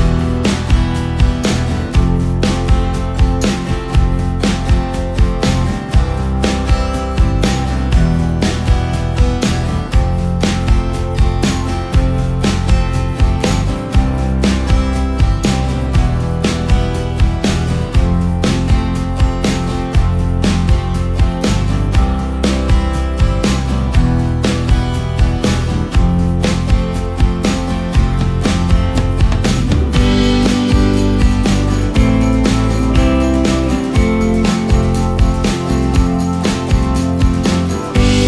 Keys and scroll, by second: 18.2 ctrl+v, 25.5 d, 26.3 k, 32.5 ctrl+space.